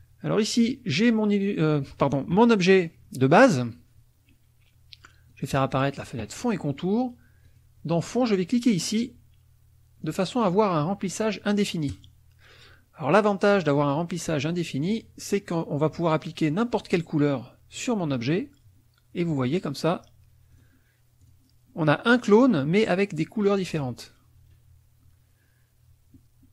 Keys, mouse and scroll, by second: 0.5 click, 5.3 click, 7.4 click, 11.9 click, 15.9 click, 18.1 click, 19.2 click, 20.5 click, 21.2 click, 23.7 click.